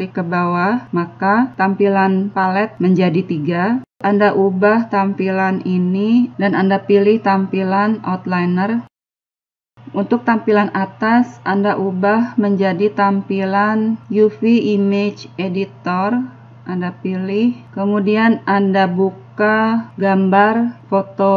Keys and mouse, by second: 0.6 click, 5.6-7.5 drag, 13.4-15.4 drag, 20.0 click, 21.3 click.